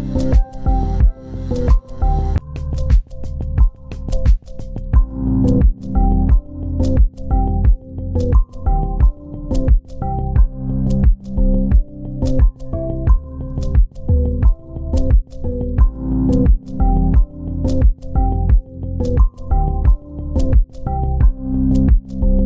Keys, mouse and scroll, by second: 0.6 scroll up 1, 1.3 scroll down 1, 2.8 ctrl+alt+click, 4.0 ctrl+c, 4.2 ctrl+click, 4.8 ctrl+v, 7.5 typing, 10.4 double click, 14.7 typing, 16.4 ctrl+click.